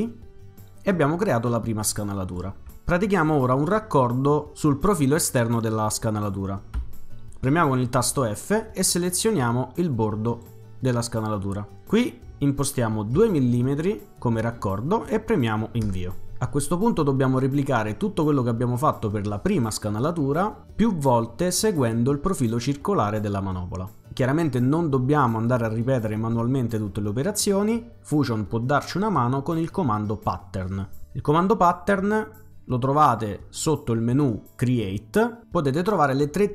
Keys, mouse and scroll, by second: 6.8 f, 10.3 click, 13.2 2, 15.8 Return, 33.6 click.